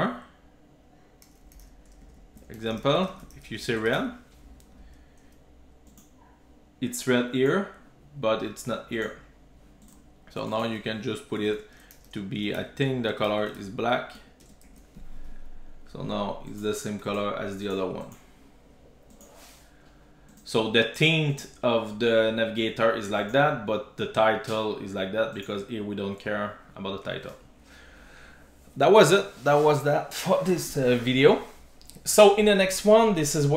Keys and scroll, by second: 3.9 super+s, 12.4 Return, 14.7 super+s.